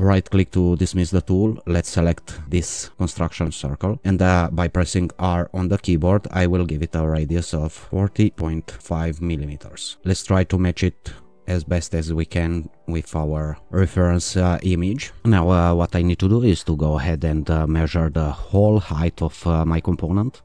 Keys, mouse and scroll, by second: 0.1-0.9 right drag, 2.1 click, 5.1 r, 7.9 0, 8.8 5, 9.0 Return, 10.0-13.7 drag, 16.0-16.6 scroll down 1, 16.6 shift+scroll down 1.